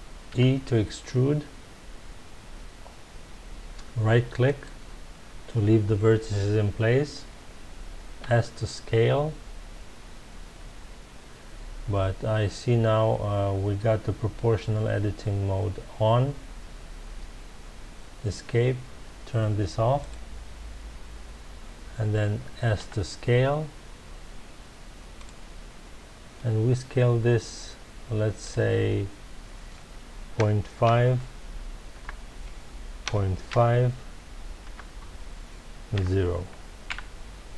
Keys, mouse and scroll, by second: 0.2 e, 4.6 right click, 8.2 s, 17.2 Escape, 20.0 click, 22.8 s, 25.2 click, 28.4-31.4 drag, 36.9 KP_Enter.